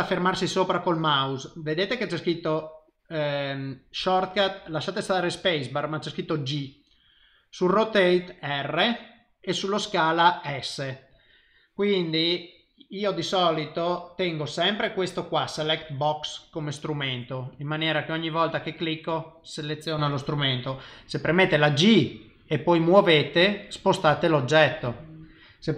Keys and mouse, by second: 15.7 click, 17.5 click, 19.1 click, 21.3 g.